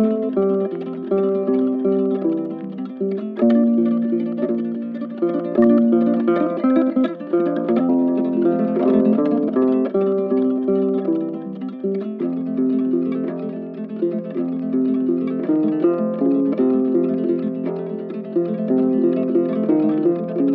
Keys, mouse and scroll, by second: 0.4 ctrl+w, 4.5 right click.